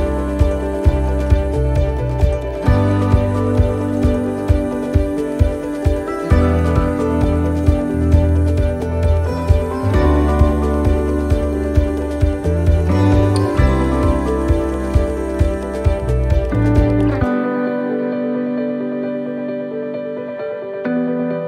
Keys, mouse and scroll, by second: 0.6 right click, 1.2 shift+right click, 2.5 shift+right click, 2.9 click, 5.0 click, 6.4 middle click, 10.5 middle click, 10.5 l, 12.2 s, 15.4 middle click, 17.3 scroll down 1, 17.9 middle click, 17.9 scroll down 4, 18.7 scroll down 2, 19.0 middle click, 19.8-20.3 scroll up 3, 20.3 shift+middle click.